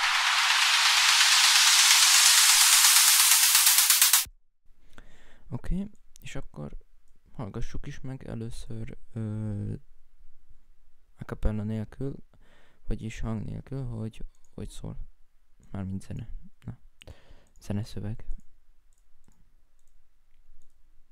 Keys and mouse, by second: 5.5 right click, 8.3 right click, 16.8 right click, 17.6 right click, 17.7 right click.